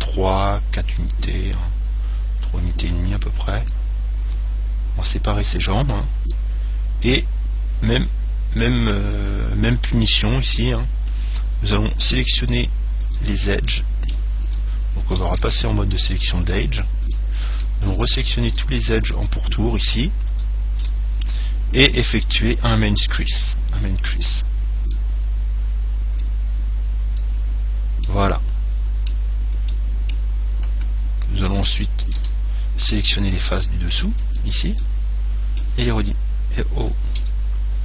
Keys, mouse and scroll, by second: 3.0-5.6 drag, 5.7 click, 7.3-9.3 middle drag, 10.4-12.4 scroll up 1, 12.4 middle click, 12.4-16.4 right drag, 13.9-15.9 middle drag, 15.6 ctrl+Tab, 17.3-22.2 right drag, 23.3 click, 26.4 click, 27.8-31.9 middle drag, 32.4 a, 33.7 c, 35.0 right click, 36.0 s.